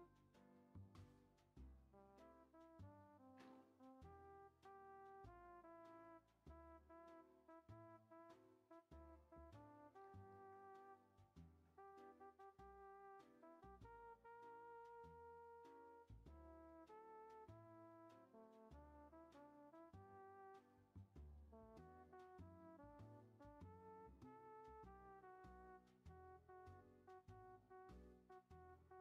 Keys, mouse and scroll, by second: 18.8-23.7 middle drag, 23.7-24.3 drag, 24.3-27.2 middle drag, 27.2 g.